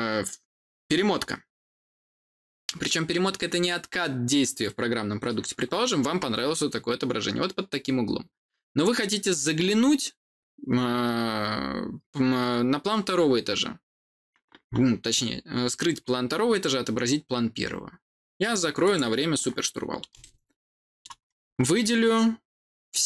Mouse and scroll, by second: 18.7 click, 20.1 middle click, 22.8 click.